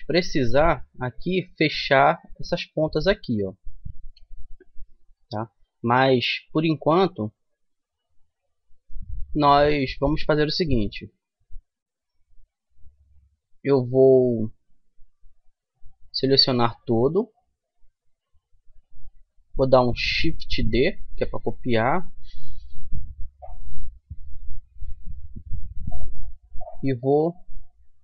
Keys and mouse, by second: 0.1-5.0 middle drag, 15.7-19.4 middle drag, 16.2 Tab, 20.5 shift+d, 27.0-28.0 drag.